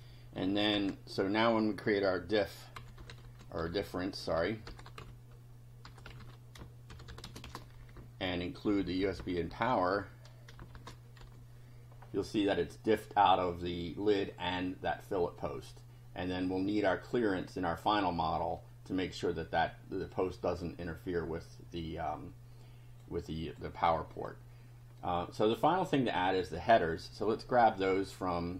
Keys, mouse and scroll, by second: 0.4 Up, 0.7 Return, 2.5-7.9 typing, 7.9 shift+Down, 10.7 shift+], 11.2 shift+F5, 12.5 click, 15.4-16.6 drag, 18.6 click, 20.6-23.2 drag, 23.4 click, 24.2 click, 25.0 click.